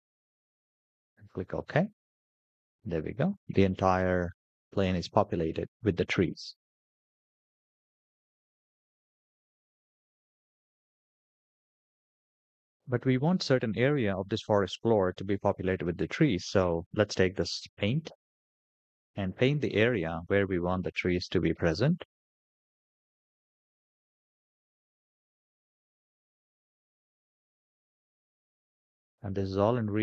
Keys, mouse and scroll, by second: 2.8-3.2 scroll down 3, 3.8-4.6 middle drag, 4.8 scroll down 1, 5.1 scroll up 3, 6.3 middle drag, 6.9-7.3 scroll down 3, 9.6-10.4 shift+middle drag, 10.9-11.4 scroll up 3, 12.3-12.7 middle drag, 13.1 scroll down 3, 20.7 middle click, 22.3 click, 23.8 scroll down 2, 24.3 middle click, 26.1-30.0 drag.